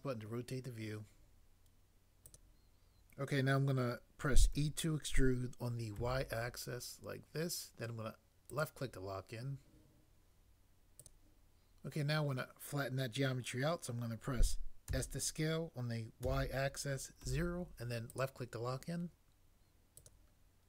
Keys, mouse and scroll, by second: 4.5 e, 6.0 y, 14.9 s, 16.3 y, 17.3 0.